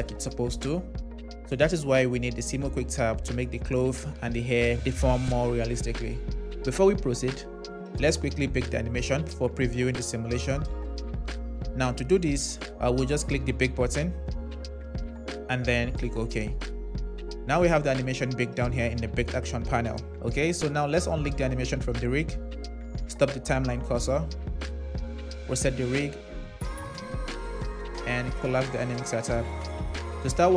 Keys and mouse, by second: 3.3 middle click, 13.5-16.8 drag, 21.4 click, 23.8 click, 25.6 click, 26.2 click, 26.5 click, 28.7 click.